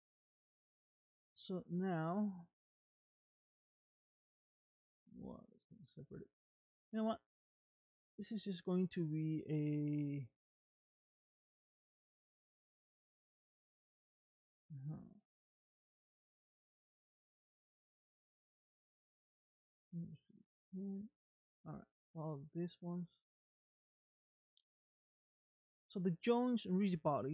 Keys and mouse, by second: 13.1 click, 17.4 click, 18.1 ctrl+Tab, 21.7 click, 25.6 click.